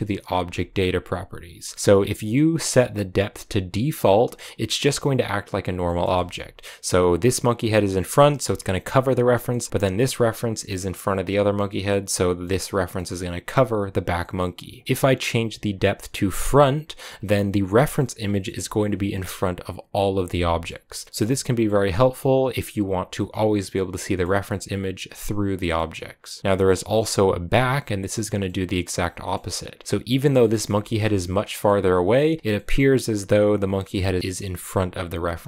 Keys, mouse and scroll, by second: 1.7-3.6 right drag, 3.6 click, 4.2-16.3 middle drag, 16.3 click, 17.0 scroll down 1, 17.1-24.4 middle drag, 24.4-25.6 right drag, 25.6-27.4 middle drag, 27.4 click, 28.3-30.0 middle drag, 30.0 right click, 30.3 middle click, 30.6 g, 31.5-34.6 middle drag, 34.6-35.4 right drag.